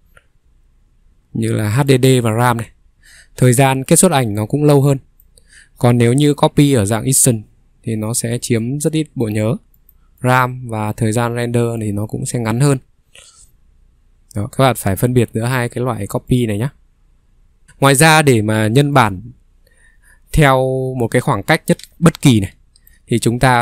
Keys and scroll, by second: 13.5 Escape, 13.8 ctrl+3, 21.8 ctrl+3, 23.5 Escape.